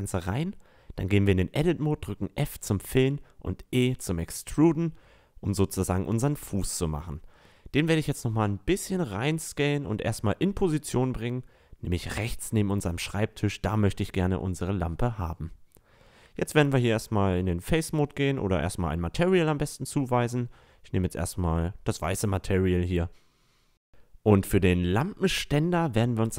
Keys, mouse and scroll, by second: 0.8 Tab, 1.5 f, 2.9 e, 4.7 Tab, 5.7-7.6 drag, 8.3 s, 9.6-13.6 drag, 14.6 Tab, 17.6 Tab, 21.7-22.4 middle drag, 25.1 middle click, 25.8 Tab.